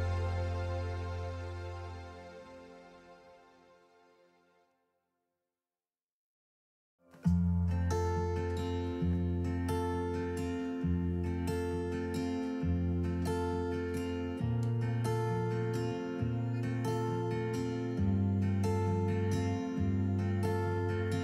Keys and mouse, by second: 5.6 ctrl+shift+KP_Subtract, 7.2-10.1 middle drag, 10.1 click, 12.9-16.2 drag, 17.2-19.0 drag.